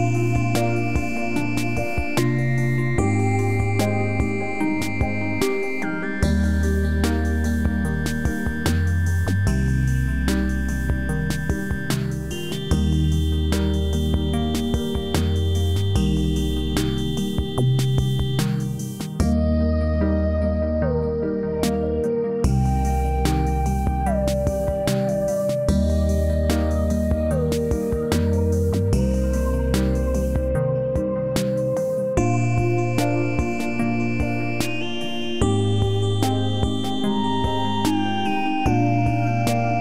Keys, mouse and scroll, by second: 4.1-5.3 scroll down 1, 5.4-6.0 alt+middle click, 6.0 scroll up 1, 7.1 click, 8.2 space, 9.9-10.9 scroll up 1, 10.9 click, 12.8-14.3 right drag, 15.0 click, 19.0 e, 19.7-20.7 drag.